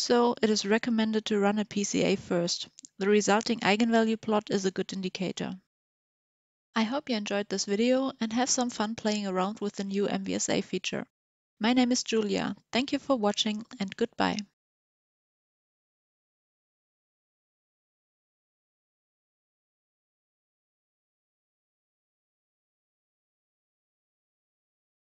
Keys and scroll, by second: 0.0-0.8 typing.